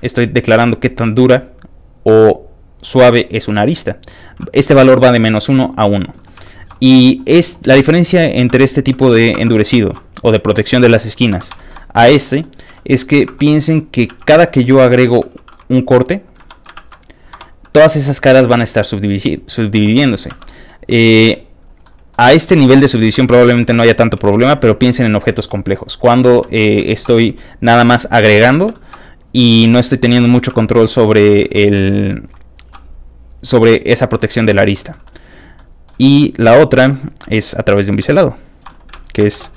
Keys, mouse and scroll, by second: 5.4 shift+click, 5.4 e, 6.4 shift+middle click, 7.6 shift+middle click, 8.3 shift+Tab, 8.5 middle click, 9.0 Tab, 9.3 Tab, 9.8 shift+e, 11.0 shift+click, 11.3 Tab, 11.5 shift+middle click, 11.9 click, 12.2 shift+middle click, 12.7 shift+middle click, 13.3 shift+Tab, 13.5 middle click, 13.8 middle click, 13.8 scroll up 2, 14.4 middle click, 15.3 ctrl+r, 15.8 ctrl+click, 16.4 Escape, 16.7 ctrl+r, 17.0 ctrl+click, 17.3 Escape, 19.9 middle click, 20.3 Tab, 20.5 middle click, 20.9 middle click, 21.1 middle click, 21.6 click, 21.8 middle click, 22.3 Tab, 23.6 shift+middle click, 24.2 shift+middle click, 24.8 shift+click, 26.3 shift+Escape, 26.8 shift+middle click, 27.2 middle click, 27.5 shift+middle click, 27.5 scroll up 2, 28.7 shift+middle click, 29.4 click, 29.7 middle click, 29.7 scroll down 1, 30.5 Tab, 30.8 middle click, 31.4 shift+middle click, 31.7-34.8 shift+middle drag, 34.9 shift+middle click, 35.3 click, 35.6 middle click, 36.0 shift+middle click, 36.5 shift+click, 36.8 shift+click, 37.2 shift+a, 37.8 click, 38.1 click, 38.3 click, 38.7 shift+middle click.